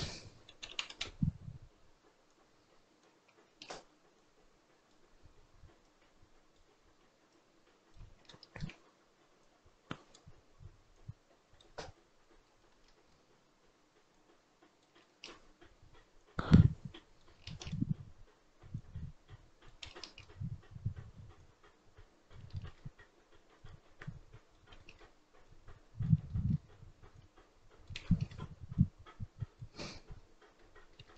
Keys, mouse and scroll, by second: 0.8-8.1 drag, 8.1-9.4 shift+middle drag, 9.4-12.3 drag, 12.3 scroll up 1, 12.6 shift+middle click, 12.9-14.0 scroll up 3, 14.0 click, 14.8-16.1 shift+middle drag, 16.1-17.3 drag, 17.3-18.6 shift+middle drag, 18.6-19.9 drag, 19.9-21.2 shift+middle drag, 21.2-22.4 drag, 22.4-23.4 shift+middle drag, 23.4-24.7 drag, 24.7 shift+middle click, 25.3 click, 26.1 shift+middle click, 27.0 click, 28.0 shift+middle click, 28.6-29.7 drag, 29.7-30.5 scroll down 12, 30.5-31.1 middle drag.